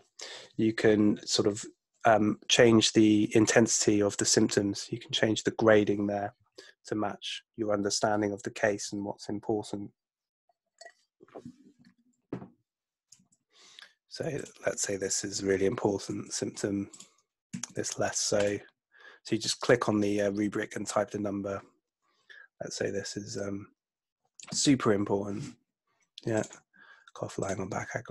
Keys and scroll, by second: 13.3 super+F2, 16.1 3, 17.5 2, 24.5 4.